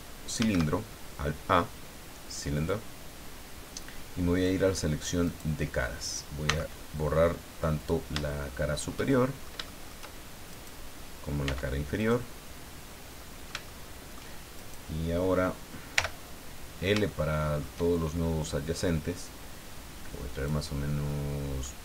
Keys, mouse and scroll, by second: 0.4 shift+a, 2.5 click, 4.3 click, 5.3 right click, 6.4 x, 7.8 click, 8.2 shift+middle click, 9.0 shift+middle click, 10.5 right click, 11.4 x, 12.0 click, 12.4 scroll down 1, 12.9-14.3 middle drag, 14.6 shift+right click, 15.9 l, 17.1 shift+middle click, 18.7-20.7 drag, 20.7-21.8 middle drag.